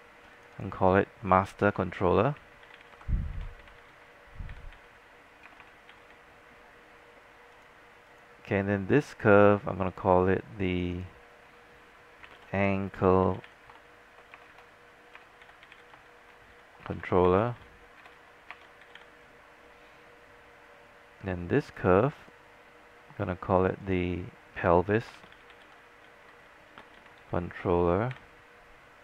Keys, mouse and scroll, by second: 0.4 click, 1.7-6.0 typing, 7.1 typing, 7.6-12.1 drag, 12.3-19.6 typing, 21.7-23.2 drag, 25.0-28.7 typing.